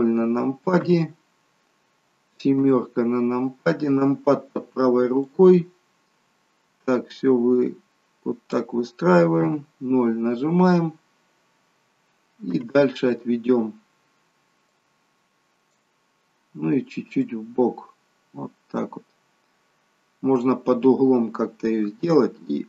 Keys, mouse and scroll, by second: 0.9 KP_0, 2.7 KP_7, 5.3 click, 9.5 KP_0, 10.8-12.4 scroll down 5, 12.5 KP_0, 14.8 click, 17.4 click, 21.8 s.